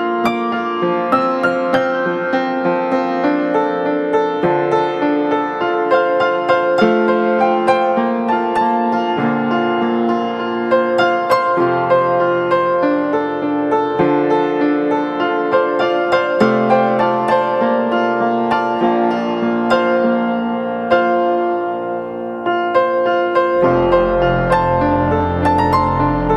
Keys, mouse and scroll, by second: 2.0 ctrl+click, 3.0 right click, 8.4 ctrl+z, 9.0 ctrl+t, 16.7 Down, 17.7 Down, 18.5 Down, 18.7 Down, 19.0 Down, 19.4 Left, 21.2 Left, 22.1 Left, 22.5 Left.